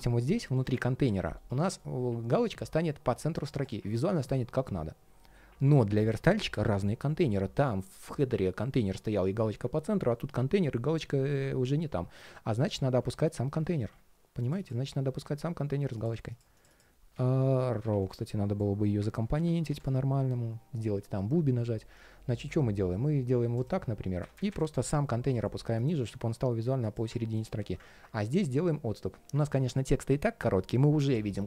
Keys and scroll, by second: 0.0 ctrl+shift+3, 1.1 ctrl+shift+3, 11.9 super+z, 12.9 ctrl+shift+3, 13.5 super+z, 18.8 super+r, 25.8 ctrl+shift+3.